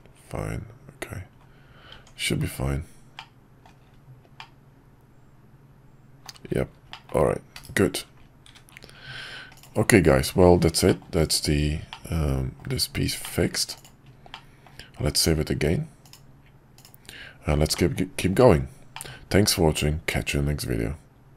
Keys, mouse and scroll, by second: 1.9 Tab, 3.2-3.6 middle drag, 4.4-6.2 middle drag, 6.9 middle drag, 10.9-11.3 middle drag, 11.9-12.6 middle drag, 13.2 middle click, 14.3-14.6 middle drag, 17.7 middle drag, 18.9 middle click.